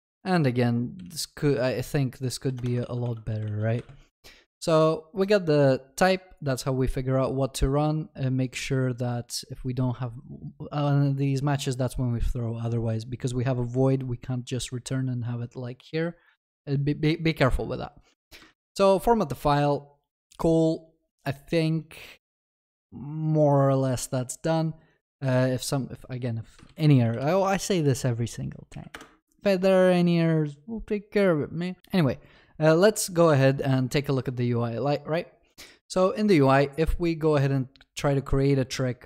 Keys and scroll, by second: 18.3 ctrl+alt+shift+l, 18.5 ctrl+s, 26.7 ctrl+shift+n, 28.9 ctrl+shift+n.